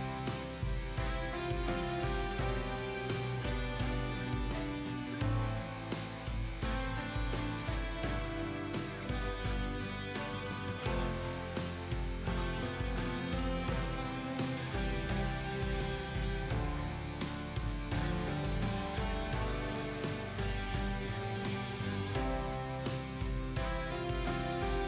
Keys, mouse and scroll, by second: 0.8-1.8 scroll up 1, 1.8 click, 2.8 scroll down 1, 3.3 click, 10.1 ctrl+a, 10.3 ctrl+a, 10.8 KP_2, 11.8 click, 14.7 ctrl+z, 14.8 click, 15.2 ctrl+z, 15.4 ctrl+z, 15.6 click, 17.6 shift+click, 18.8 click, 19.4 scroll up 1, 20.3 click, 21.5 scroll down 1, 22.7 click.